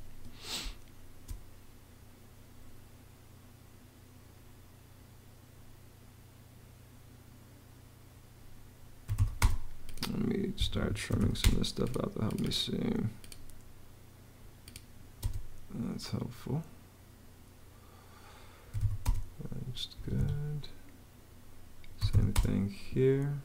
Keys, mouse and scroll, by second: 0.4 space, 8.6-9.4 typing, 10.3 Escape, 10.6-11.5 typing, 15.0 space, 18.2-19.1 typing, 19.8 Escape, 21.6-22.4 typing.